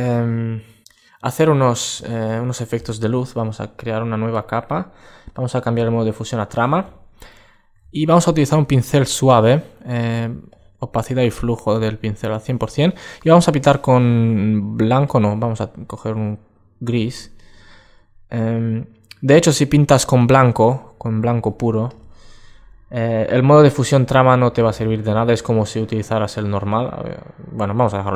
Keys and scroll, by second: 6.7 alt+space.